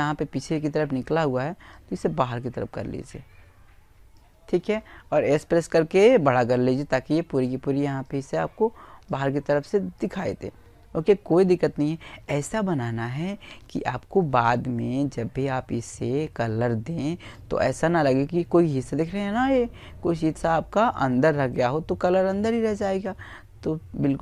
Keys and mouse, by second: 3.0 s, 6.0-8.4 drag, 8.0 right click, 8.7-13.4 middle drag, 15.3 middle click, 19.5-21.1 middle drag, 20.8 click, 20.8 right click.